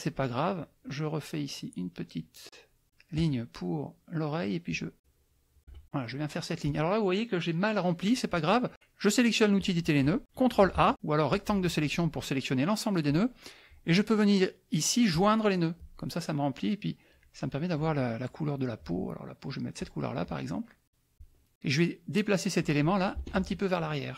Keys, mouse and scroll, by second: 0.8-2.8 shift+drag, 4.7 shift+click, 9.6 click, 10.8 ctrl+a, 11.3 click, 15.1 click, 19.7 click, 21.1-23.2 drag, 23.4 ctrl+z.